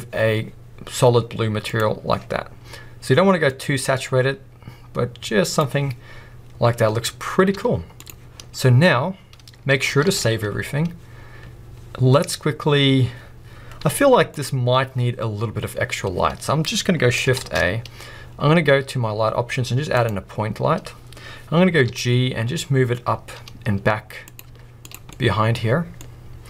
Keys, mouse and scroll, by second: 0.4 scroll up 1, 1.9 click, 7.8 z, 8.9-9.4 scroll down 2, 10.5-10.9 scroll up 1, 14.6 z, 20.1 shift+a, 21.9 g, 24.5 click, 24.6 z, 25.1-26.4 middle drag.